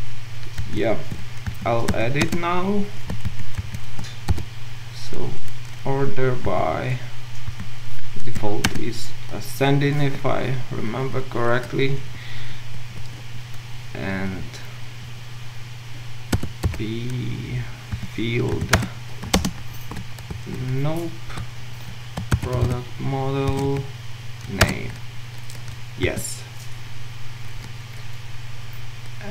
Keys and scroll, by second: 0.6 ctrl+alt+Left, 8.7 Return, 18.8 Return, 19.3 Return, 19.4 ctrl+shift+space, 20.3 ctrl+z, 23.5 Return.